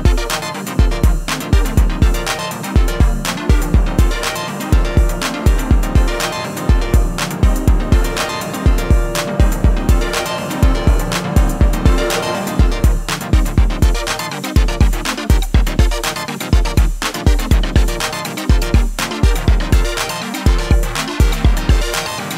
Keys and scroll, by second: 0.4 ctrl+r, 9.4 ctrl+b.